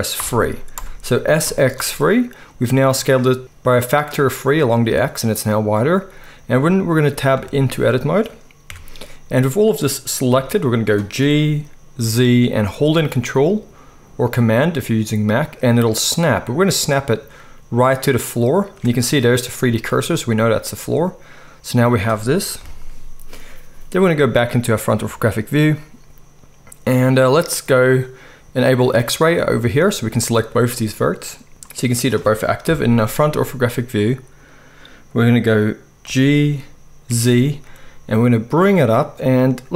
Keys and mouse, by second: 7.3 `, 8.7 Tab, 10.3 g, 11.2 g, 22.6 KP_1, 28.9-39.7 drag, 32.6 KP_1, 36.0 g.